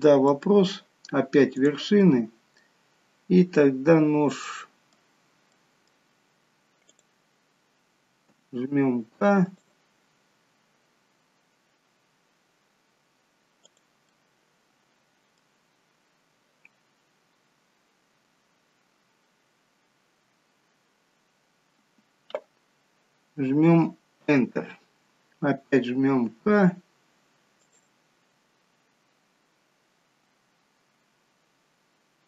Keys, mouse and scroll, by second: 0.4 middle click, 1.7 click, 2.3 middle click, 4.5 middle click, 6.9 click, 8.4 k, 14.2 middle click, 26.3 k.